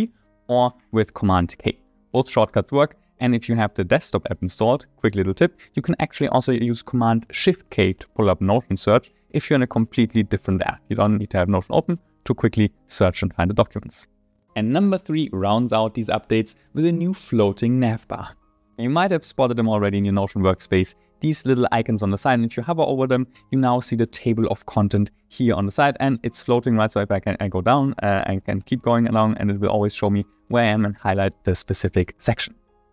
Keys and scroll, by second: 1.3 super+k.